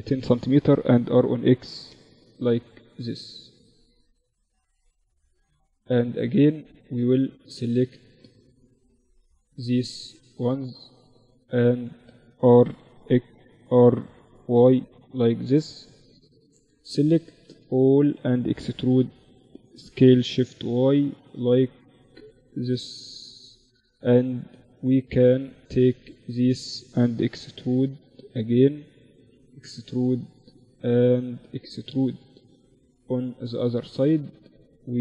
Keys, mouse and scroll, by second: 1.5 s, 4.3-6.4 middle drag, 4.4 Tab, 6.4-8.1 drag, 7.0 a, 7.6 a, 8.1 middle click, 8.5-10.2 right drag, 10.2-11.6 drag, 10.6 a, 10.9 a, 11.6 r, 13.2 r, 15.0-16.9 right drag, 16.3 a, 16.5 a, 17.8 e, 22.4 middle click, 22.6-26.4 right drag, 23.5-26.2 drag, 26.2 e, 28.0 e, 29.9 e, 32.6-34.2 right drag, 34.2 middle click, 34.9-35.0 right drag.